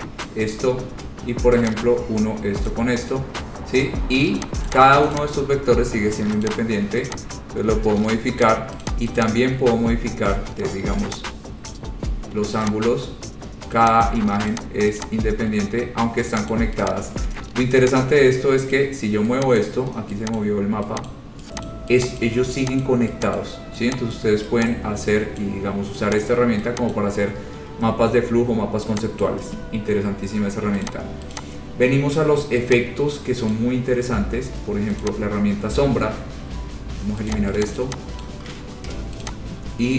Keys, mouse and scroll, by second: 0.4 click, 4.6 click, 4.9 click, 5.4 click, 6.6 click, 7.3 click, 8.6 click, 9.0 click, 9.4 click, 12.0 click, 12.9 click, 14.2 click, 14.7 click, 15.2 click, 16.7 click, 17.0 click, 18.9 click, 19.8 click, 20.6 click, 21.3 click, 21.9 click, 22.4 click, 23.0 click, 23.6 click, 24.4 click, 25.6 click, 26.4 click, 27.1 click, 28.0-28.5 scroll, 29.4 click, 31.0 click, 31.5 click, 31.8 scroll down 4, 33.7 click, 35.2 click, 35.6 scroll down 3, 35.9-36.4 scroll up 6, 36.6 scroll, 37.5 click, 37.8 click, 38.4 click, 39.1 Delete, 39.4 click.